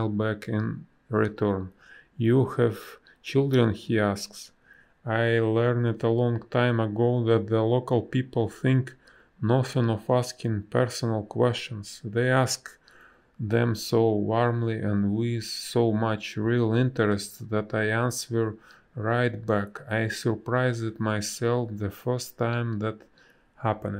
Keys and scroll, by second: 4.3 space, 4.9 a, 11.2 space, 12.6 space, 16.7 b, 20.1 space.